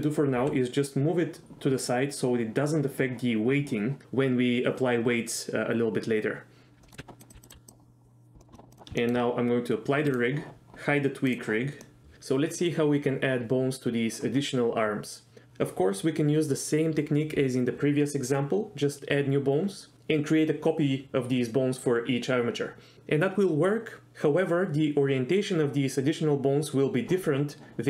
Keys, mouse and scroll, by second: 0.4 g, 1.8 click, 6.8 middle drag, 7.0 KP_1, 7.2 click, 7.3 g, 7.4 click, 7.5 g, 8.4 middle click, 8.5 shift+middle click, 8.7 click, 9.0 shift+middle click, 11.3 click, 11.8 middle click.